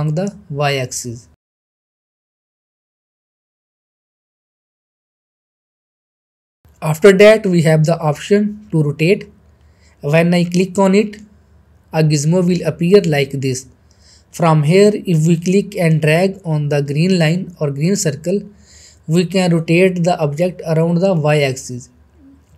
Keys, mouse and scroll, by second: 1.2 ctrl+z, 1.3 middle click, 1.5 shift+middle click, 2.4 scroll down 1, 2.4 shift+middle click, 2.9-3.2 click, 3.3 ctrl+z, 3.4 scroll down 1, 3.4 middle click, 4.0-4.3 click, 5.0 ctrl+z, 5.6-7.7 drag, 7.8 ctrl+z, 7.9 middle click, 9.7 shift+middle click, 10.9-12.5 middle drag, 14.9-19.2 drag, 19.5 ctrl+z, 20.5-22.1 middle drag.